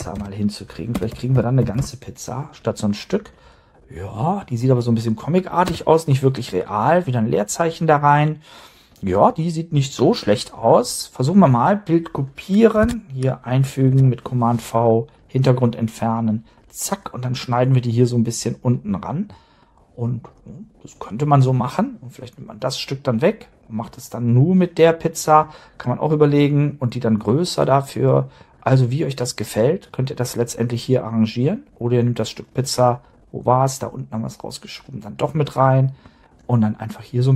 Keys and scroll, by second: 0.0-1.8 typing, 5.6 space, 12.8 super+Tab, 13.9 super+v.